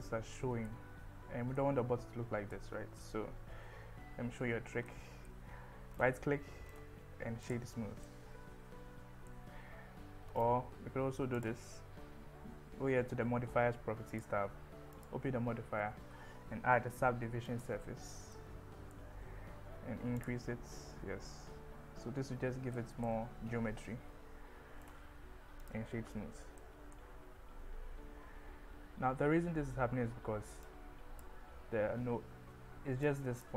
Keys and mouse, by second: 1.6-2.7 middle drag, 3.9 KP_1, 4.9-5.3 middle drag, 6.8 click, 6.9-7.5 right drag, 8.0-9.3 middle drag, 15.1-17.8 drag, 18.4-19.1 middle drag, 20.2 click, 22.8 middle click, 26.8-28.0 middle drag, 26.9 KP_1, 27.6 Tab, 30.7 click, 33.1 click.